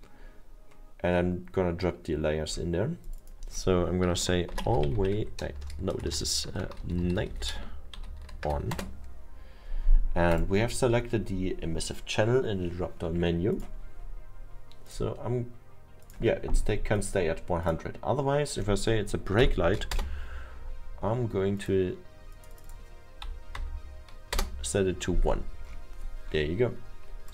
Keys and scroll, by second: 4.3-7.2 typing, 8.8 space, 19.4 1, 20.9 Return, 23.6 1, 26.0 Return.